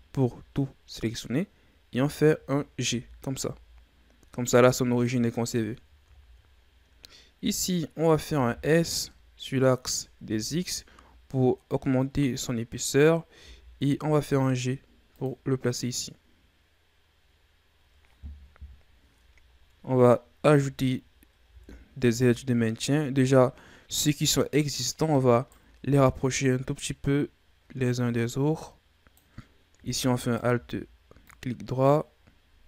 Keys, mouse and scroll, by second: 2.8 g, 4.9-5.6 scroll down 4, 5.6-6.2 ctrl+scroll up 4, 6.2-6.5 scroll down 2, 6.5-6.8 scroll up 4, 8.2 s, 13.4 g, 19.5-21.7 ctrl+scroll up 6, 21.7-22.8 ctrl+scroll up 4, 25.3 alt+right click, 26.4-29.5 drag, 30.2 alt+right click, 31.2-32.6 drag.